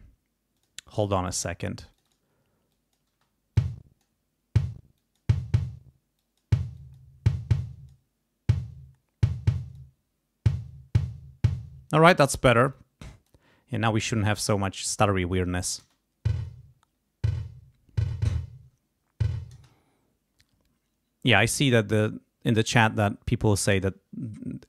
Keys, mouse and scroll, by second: 0.5 click, 1.1 click, 1.9 click, 2.7 click, 3.1 space, 3.5 click, 4.9 click, 6.1 click, 6.7 click, 7.5 click, 9.5 click, 12.1 space, 12.3 click, 12.7 click, 14.0 click, 14.6 click, 15.8 space, 19.5 space.